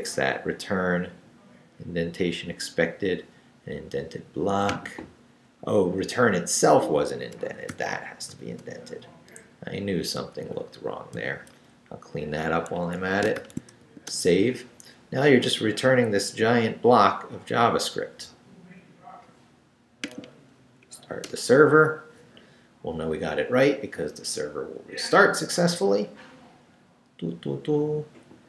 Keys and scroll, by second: 5.5 Left, 7.7 shift+., 9.1 shift+Right, 9.7 Right, 10.4 Right, 11.1 i, 11.5 BackSpace, 12.8 Escape, 13.4 shift+;, 13.8 shift+w, 14.1 Return, 20.8 Up, 21.2 Return.